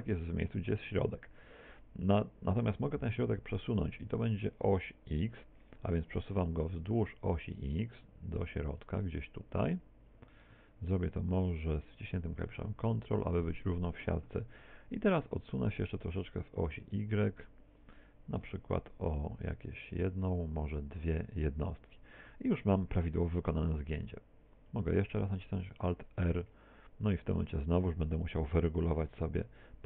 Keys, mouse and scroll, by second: 6.3 click, 16.5 click, 26.1 alt+r, 29.1 click.